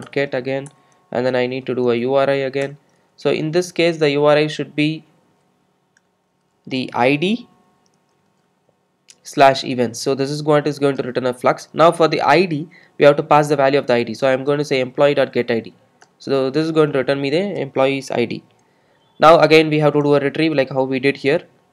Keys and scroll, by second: 0.1 Return, 14.2 Return.